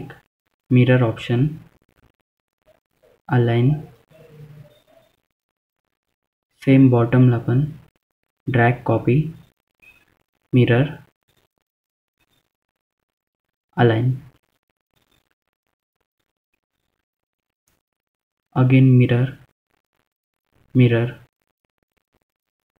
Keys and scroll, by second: 2.1 F3, 2.8 F2, 10.3 F2, 20.4 F3, 21.1 F3, 21.4 F2.